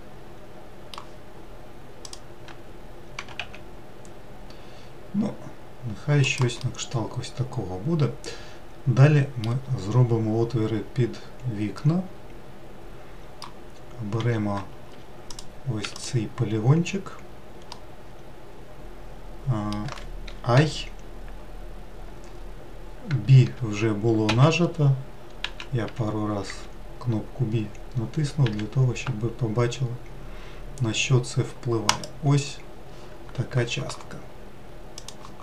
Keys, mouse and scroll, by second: 2.7 click, 3.9 g, 7.3-10.5 middle drag, 12.5-15.6 middle drag, 15.6 4, 16.0 click, 16.5 3, 16.6 click, 18.4-21.2 middle drag.